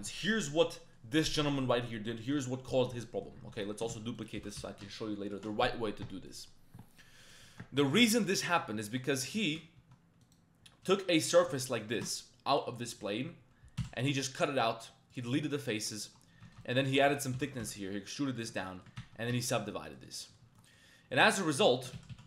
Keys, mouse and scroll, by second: 0.5 middle click, 1.6 middle click, 3.0 middle click, 3.5 Tab, 3.6 middle click, 3.9 shift+d, 4.4 g, 4.6 y, 6.3 middle drag, 7.2 click, 7.4 Tab, 8.3 click, 8.8 click, 9.4 shift+click, 9.8 3, 11.8 ctrl+shift+click, 12.7 shift+click, 13.8 x, 15.7 Tab, 15.9 click, 16.3 Tab, 16.4 1, 16.6 alt+click, 16.9 middle click, 17.1 e, 17.3 g, 17.6 z, 18.5 Tab, 18.7 middle click, 19.0 ctrl+1, 19.3 ctrl+2, 19.9 shift+click, 20.2 shift+drag, 20.4 Tab, 20.6 click, 22.0 ctrl+z, 22.1 ctrl+z.